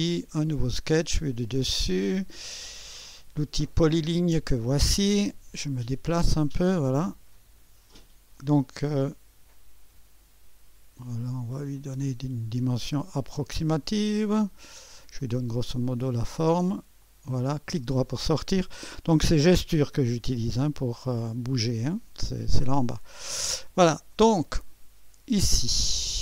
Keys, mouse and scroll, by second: 1.6 click, 2.3 click, 4.0-5.1 drag, 5.4-6.6 right drag, 6.3-8.0 scroll down 1, 8.0-9.2 drag, 11.8-12.8 drag, 13.7 click, 15.2-16.3 drag, 17.0 click, 17.9 click, 17.9 right click, 22.8-25.2 right drag, 25.5-26.2 drag.